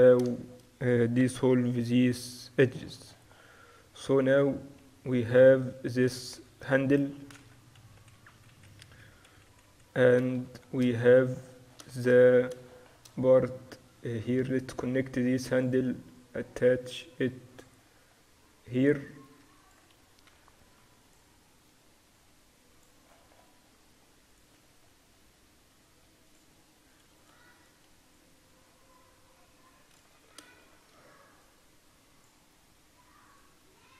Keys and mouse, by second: 2.8 middle click, 3.0 Tab, 4.0 Tab, 4.3 a, 4.9 a, 5.9 a, 6.1 a, 6.8 Tab, 7.5-9.8 typing, 14.8-20.6 drag, 20.3 s, 22.2-24.3 drag, 24.3 middle click, 24.6 Tab, 24.6 click, 25.2-26.3 middle drag, 26.3 click, 30.0 click, 30.2 Tab, 31.6-33.2 drag, 33.2 middle click, 33.7 click.